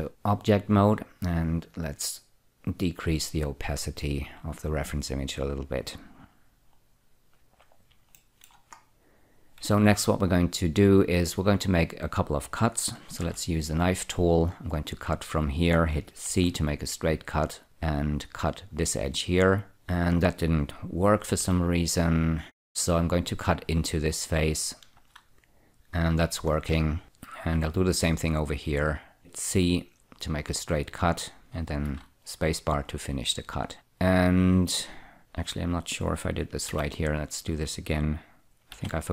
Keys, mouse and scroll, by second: 1.2 click, 2.5 click, 7.7 click, 8.5 shift+middle click, 9.1-9.9 scroll up 1, 9.9 Tab, 10.1 1, 13.5 k, 15.2 click, 16.6 c, 18.1 click, 21.7 k, 23.1 click, 24.7 click, 25.3 space, 26.8 scroll up 2, 27.0 click, 27.9 k, 28.4 click, 29.8 c, 30.1 click, 32.2 space, 33.1 scroll up 1, 37.0 k, 38.3 click, 39.0 c.